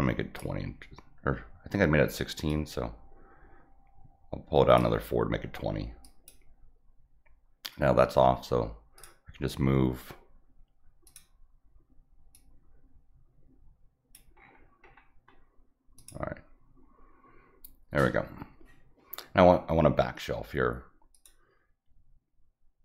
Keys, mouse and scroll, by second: 2.4-4.7 drag, 6.0 click, 8.9 click, 11.0 click, 12.3-14.1 drag, 14.4-14.9 scroll up 4, 15.9 click, 21.1 click.